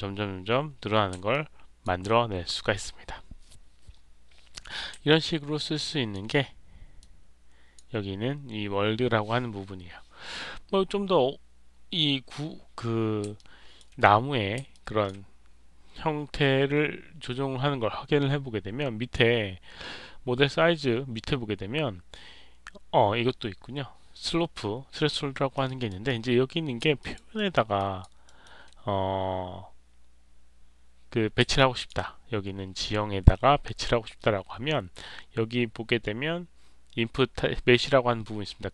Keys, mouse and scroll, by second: 1.5 alt+click, 5.0-6.0 alt+drag, 6.9 click, 13.3 alt+click, 14.6 alt+click, 25.2 alt+middle click, 25.6 alt+right click, 26.0 alt+click, 26.9 alt+right click, 27.3 alt+middle click, 27.7 alt+click, 28.2 alt+middle click, 31.5 alt+click.